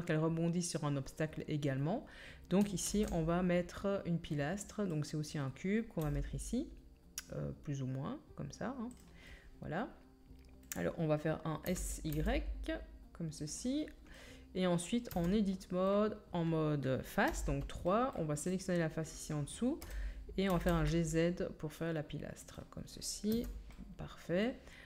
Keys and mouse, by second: 2.8 shift+a, 6.0 g, 6.9-9.4 drag, 9.4-15.1 right drag, 11.7 s, 15.1 Tab, 15.1-24.8 drag, 17.3 3, 19.8 KP_1, 20.5 g, 23.3 Tab.